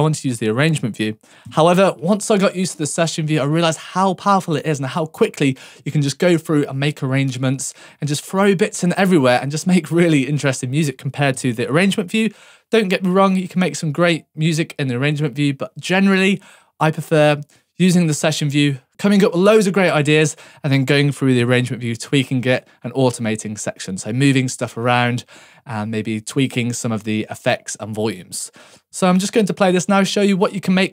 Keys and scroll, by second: 1.4 Tab, 11.3 Tab, 18.1 Tab, 21.4 Tab, 28.0 Tab.